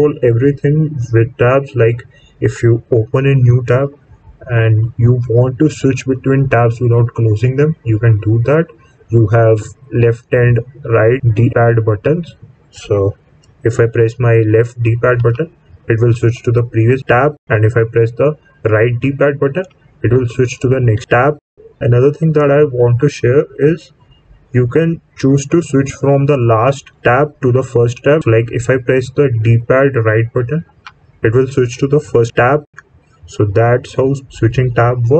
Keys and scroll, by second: 3.4 Menu, 15.1 Left, 19.5 Right, 30.6 Right.